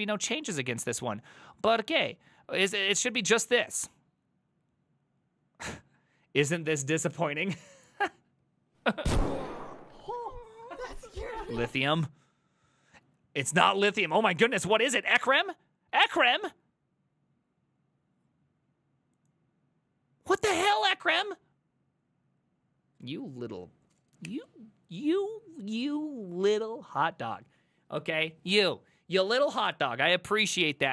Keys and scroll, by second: 11.7 alt+f.